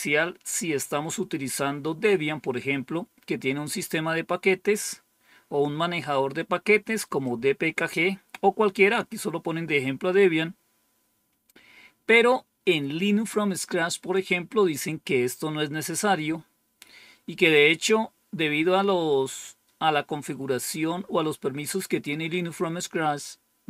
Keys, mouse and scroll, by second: 7.1 click.